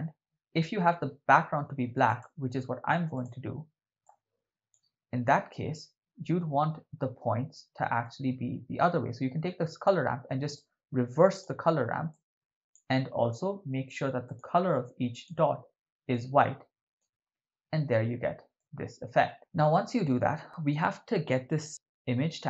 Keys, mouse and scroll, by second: 2.1 click, 3.2 click, 8.0-9.9 drag, 10.6-11.5 drag, 12.2-12.8 drag, 14.2 click, 14.4-15.2 drag, 18.6-19.3 ctrl+middle drag.